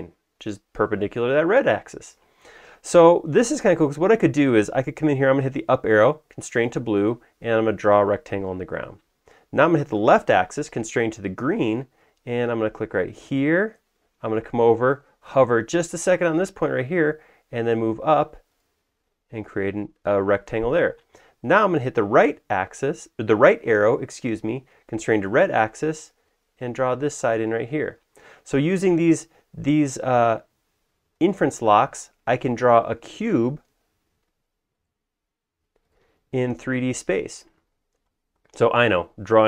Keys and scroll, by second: 3.3 Escape, 5.6 Up, 10.4 Left, 21.9 Right, 30.0 Right, 33.6 Left.